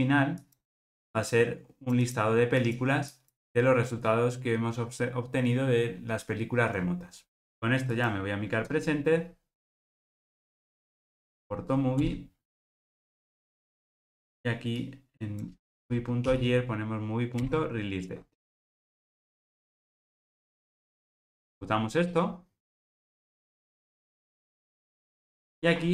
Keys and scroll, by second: 11.1 alt+Return, 21.2 Return.